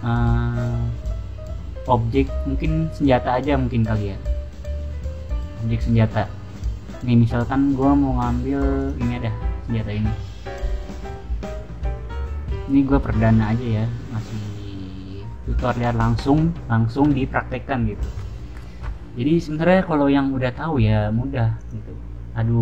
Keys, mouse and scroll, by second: 2.2-3.8 scroll down 2, 4.3 scroll up 2, 5.1-6.1 scroll down 3, 8.7 click, 14.0 scroll down 1, 15.5-20.5 scroll down 1, 20.5 middle click, 21.5 click.